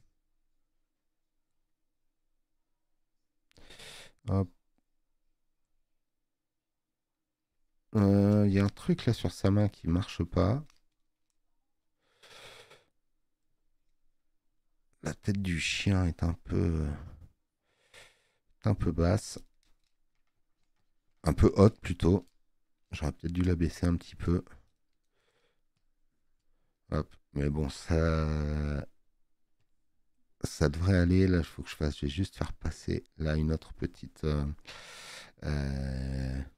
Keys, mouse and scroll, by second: 29.7 click, 31.1 click.